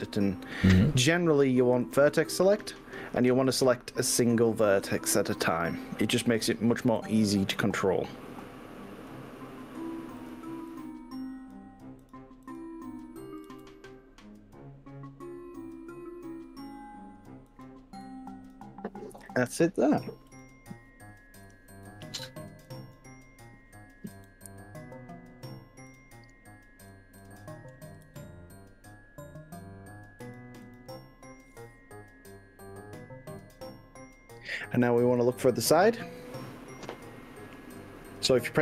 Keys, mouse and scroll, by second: 1.8 click, 4.2 click, 5.4 click, 7.0 g, 10.2 click, 10.8 click, 12.0 click, 12.4 click, 13.6 g, 17.6 click, 18.2 click, 19.4 click, 20.4 click, 22.0 click, 22.7 click, 24.2 g, 26.0 click, 27.0 click, 28.1 g, 30.3 click, 30.7 click, 35.2 click, 35.8-37.8 middle drag, 37.8 click.